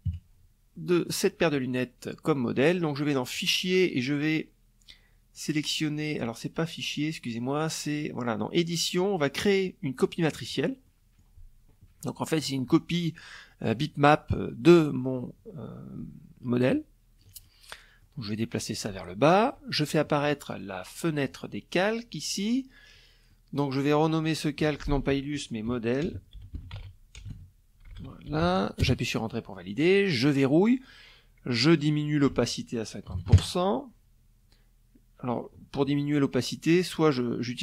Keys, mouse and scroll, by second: 1.9 click, 8.8 click, 9.4 click, 10.6 click, 12.9-15.9 drag, 16.0 ctrl+click, 17.3 ctrl+click, 18.8 click, 19.7 click, 21.9 middle click, 22.0 click, 22.8 click, 24.2-27.5 typing, 28.9 click, 30.3 click, 31.4-32.2 typing, 35.3-37.6 drag.